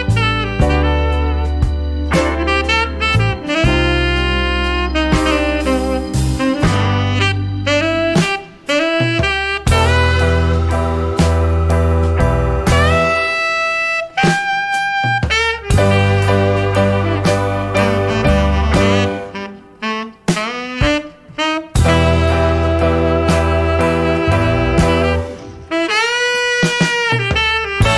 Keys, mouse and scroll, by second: 0.0 click, 0.9-1.7 typing, 2.2 click, 3.2 click, 3.8-9.7 drag, 9.9 0, 10.7-11.0 scroll down 2, 11.5 scroll up 2, 11.6 click, 12.4 scroll up 2, 12.6 click, 13.0 scroll down 2, 14.5 click, 15.6 click, 16.9 click, 17.7 click, 18.7 click, 19.7 ,, 21.5 3, 22.5 click, 23.5-24.6 scroll up 6, 24.9 scroll down 2, 26.0 click, 26.7 click, 27.6 right click.